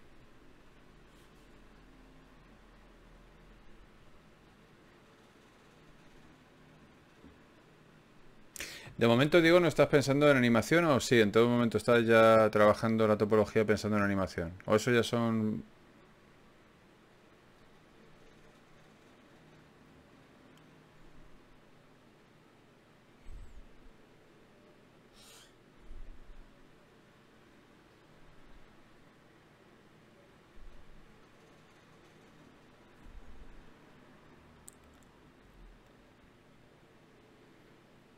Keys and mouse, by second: 4.0-8.0 drag, 4.0 right click, 8.0-9.2 right drag, 8.8 f, 9.2 ctrl+Tab, 11.0 f, 11.2 f, 12.0 ctrl+z, 12.2 ctrl+z, 12.6 click, 14.6 f, 15.7-17.1 drag, 15.7 f, 15.8 f, 16.6 f, 17.5 f, 34.8-38.1 middle drag.